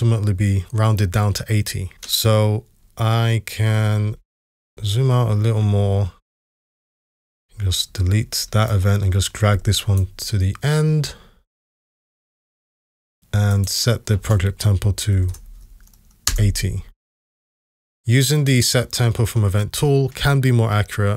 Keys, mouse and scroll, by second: 7.9 Delete, 15.2 typing, 16.3 Return.